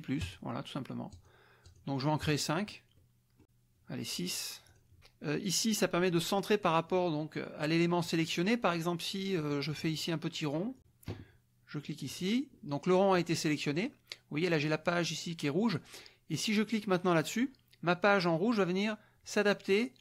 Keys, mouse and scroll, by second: 0.2 click, 1.1 click, 1.6 click, 2.2 click, 2.9 click, 4.6 click, 9.7 click, 10.8 click, 12.0 click.